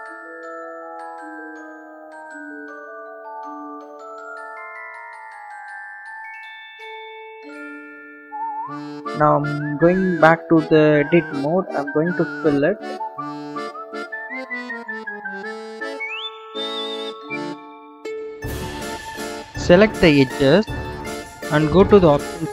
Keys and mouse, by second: 0.0 click, 1.0-2.6 drag, 4.4 s, 7.2-7.7 drag, 8.1 s, 11.2 Tab, 12.2 f, 18.0 click.